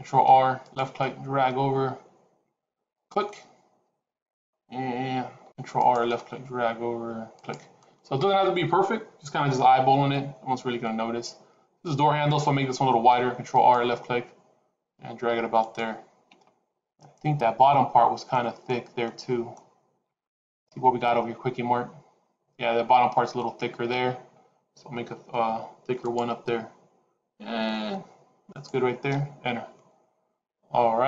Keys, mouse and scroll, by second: 0.0 ctrl+r, 5.2 ctrl+r, 12.8 ctrl+r, 25.0 ctrl+r.